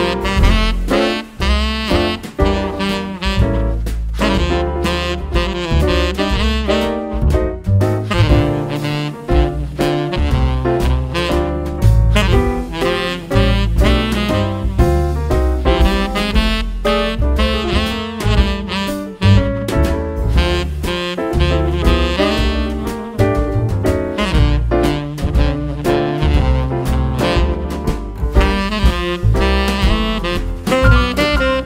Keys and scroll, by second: 6.5 ctrl+d.